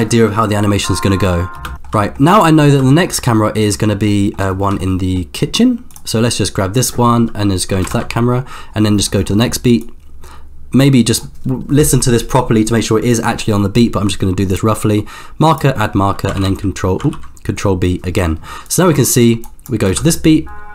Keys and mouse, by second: 1.6 space, 4.3 middle click, 4.5 shift+middle click, 4.8-5.3 middle drag, 5.9 click, 8.0 ctrl+KP_0, 9.8 click, 14.5-15.8 drag, 16.3 ctrl+v, 17.3 ctrl+b, 18.7-20.1 drag, 20.1 space.